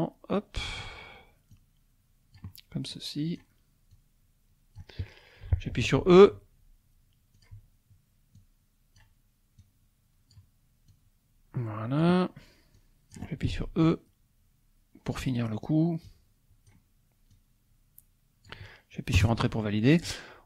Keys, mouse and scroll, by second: 1.6 click, 2.9 click, 4.0-5.2 drag, 6.1 e, 7.4 click, 8.4 click, 9.6-10.8 drag, 11.0-12.5 drag, 12.8 click, 13.5 e, 15.2 click, 16.1 click, 17.3-18.7 drag, 19.2 Return.